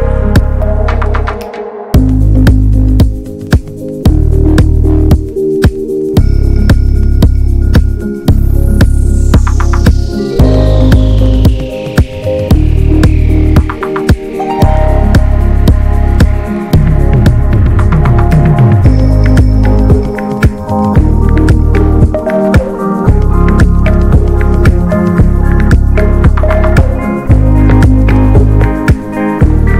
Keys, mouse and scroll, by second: 0.2-0.6 scroll down 3, 0.6 scroll up 3, 0.8 ctrl+1, 1.1 ctrl+2, 1.3 ctrl+3, 1.6 right click, 2.3 alt+middle click, 2.4-3.0 scroll up 2, 3.0 click, 3.3 shift+middle click, 3.6 Tab, 3.8 alt+z, 4.1 click, 4.8-5.8 drag, 5.8 alt+middle click, 5.9 alt+z, 6.2 Tab, 6.4 click, 6.5 ctrl+a, 6.9 ctrl+s, 7.1 Tab, 7.3 a, 7.6 shift+middle click, 8.0 s, 8.9 click, 9.3 shift+middle click, 9.6 Tab, 9.8 ctrl+a, 10.2 ctrl+s, 11.2 n, 11.9 click, 12.5 ctrl+s, 12.7 click, 12.8 scroll down 1, 13.0 n, 13.1-13.5 scroll up 1, 13.5 click, 13.8 Tab, 13.9 a, 14.2-14.9 alt+scroll up 4, 14.5 shift+middle click, 14.9 ctrl+s, 15.2 click, 15.9 alt+middle click, 16.5-17.6 drag, 17.6 alt+middle click, 18.1-19.2 ctrl+scroll up 3, 18.2 ctrl+s, 18.6 shift+middle click, 19.2 ctrl+s, 19.5 r, 20.5 shift+d, 21.5 shift+middle click, 21.7 alt+z, 22.0 click, 22.8 ctrl+s, 22.9-23.4 scroll up 2, 23.0 shift+middle click, 23.4 s, 23.9-24.5 scroll down 2, 24.0 shift+middle click, 24.5 s, 25.3 click, 26.1 scroll down 3, 26.2 Tab, 26.4 click, 26.6 scroll up 2, 26.8 ctrl+s, 27.2 Tab, 27.4 middle click, 27.8 middle click, 28.1 scroll down 2, 28.3 alt+middle click, 28.7 alt+z, 29.1 click.